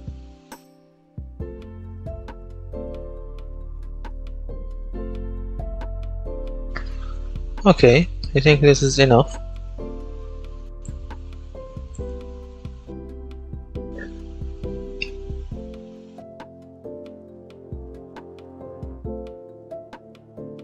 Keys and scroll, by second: 0.0-5.6 typing, 6.8-8.7 typing, 12.3-18.5 typing.